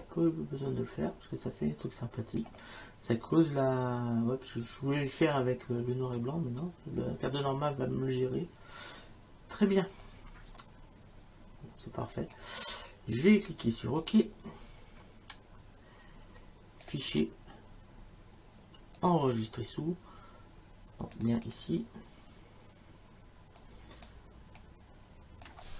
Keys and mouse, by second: 10.0 click, 14.0 click, 16.9 click, 19.0 click, 21.2 click, 23.6 click.